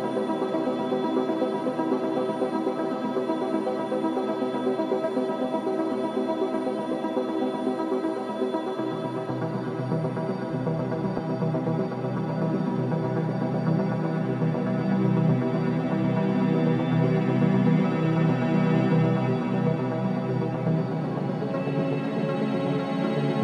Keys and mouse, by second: 0.8 typing, 4.7 space, 6.6 drag, 7.7 click, 8.5 shift+click, 8.9 shift+click, 9.8-10.9 shift+drag, 11.9-12.9 drag, 13.4 1, 13.6 Return, 14.8-15.9 drag, 15.9 BackSpace, 16.1 1, 16.2 Return, 17.8-18.7 drag, 20.2 click, 20.7 space.